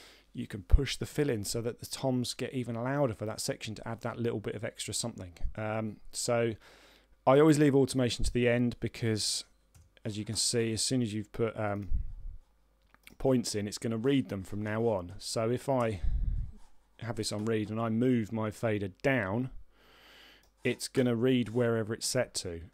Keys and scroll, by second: 10.6 a, 15.5 Return.